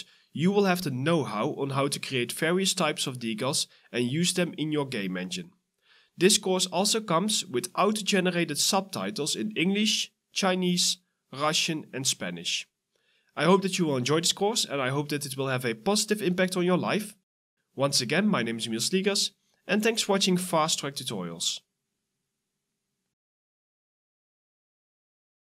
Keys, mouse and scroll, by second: 0.3 ctrl+d, 0.9-4.1 typing, 2.8 right click, 5.2 s, 5.6 a.